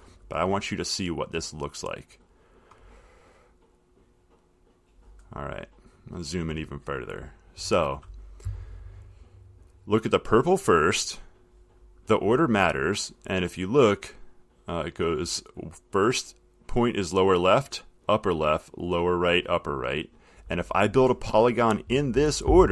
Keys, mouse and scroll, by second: 1.0 click, 2.0 click, 4.3 click, 5.7-6.2 middle click, 5.7 middle click.